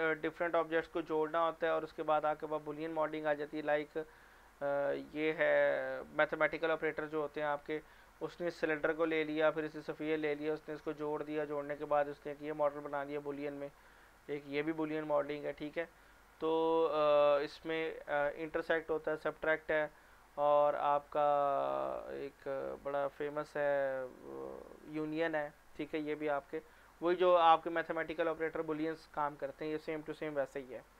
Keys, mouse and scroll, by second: 3.7 click, 12.2 scroll down 1, 13.0 scroll down 1, 14.2 click, 16.3-17.4 scroll down 1, 17.4 scroll up 1, 22.7 click, 25.7 scroll up 1.